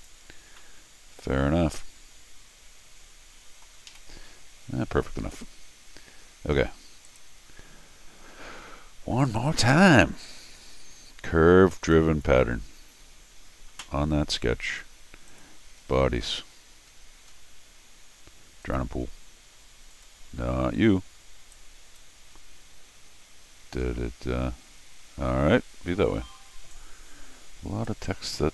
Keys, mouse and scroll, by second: 0.6-3.6 middle drag, 3.9 r, 7.0 click, 9.8 click, 11.8 click, 15.3 click, 15.8 scroll up 2, 15.8-16.4 scroll down 4, 16.5 scroll up 2, 18.6 click, 19.9 click, 21.5 click, 26.7-27.8 drag.